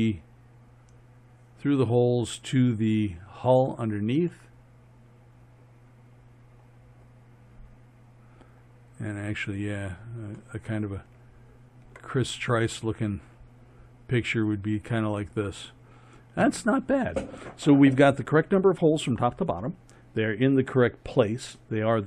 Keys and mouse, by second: 4.6 middle click, 4.8 middle click, 5.0 middle click, 5.2 middle drag, 5.4 middle click, 5.6 middle click, 5.8 middle drag, 6.4 middle click, 6.8 middle click, 7.7-12.8 middle drag.